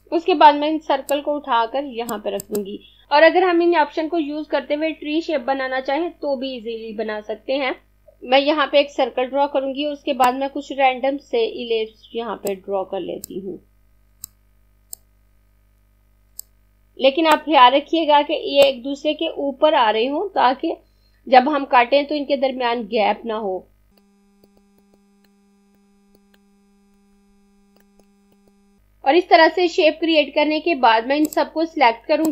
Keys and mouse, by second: 8.0 click, 10.4 click, 24.0 click, 27.8 click, 31.2 click.